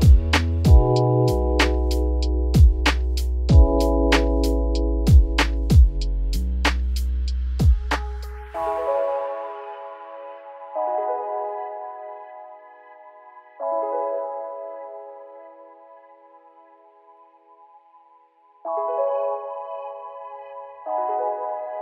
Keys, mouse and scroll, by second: 1.4 ctrl+z, 1.8 ctrl+z, 2.8-3.9 middle drag, 3.9 ., 5.6-6.1 scroll up 1, 6.1 s, 8.4 Tab, 8.5 scroll down 1, 8.6-13.0 middle drag, 13.0-15.1 shift+drag, 16.0 scroll up 1, 16.2 Tab, 16.5 click, 17.1 alt+click, 18.1 alt+shift+click, 19.0 ctrl+b, 21.4 shift+middle click, 21.7-21.8 scroll up 4.